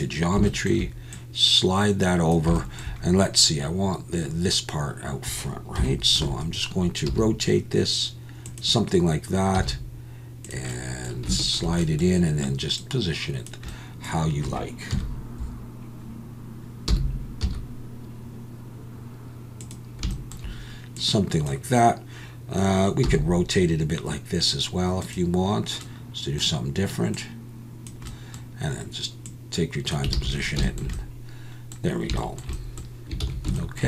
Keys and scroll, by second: 5.8 KP_7, 7.1 r, 9.6 g, 14.9 KP_1, 16.9 r, 17.4 z, 23.0 r, 30.2 alt+a, 33.2 ctrl+s.